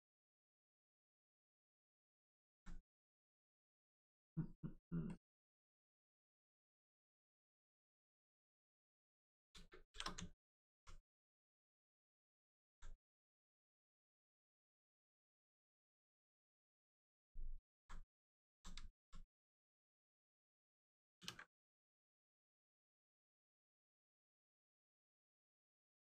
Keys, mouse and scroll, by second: 0.0 alt+click, 0.6 alt+right click, 1.9 alt+click, 2.9 click, 5.0 click, 8.3 click, 9.8 shift+f, 10.2 alt+right click, 11.7 click, 11.8 click, 12.6 alt+right click, 13.9 click, 14.7 click, 17.3 alt+right click, 18.3 alt+click, 18.8 alt+right click, 21.1 ctrl+w, 21.8 click, 24.3 click.